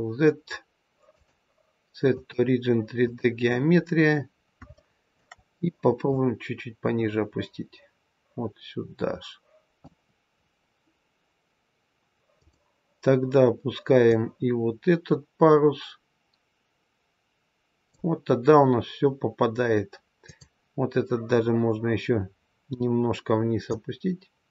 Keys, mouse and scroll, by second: 1.0 click, 3.6-4.4 scroll up 3, 4.7 shift+middle click, 6.0 click, 10.3-11.0 scroll down 2, 12.3 click, 14.0 click, 20.1 click, 21.4-21.9 scroll up 1, 23.6 click.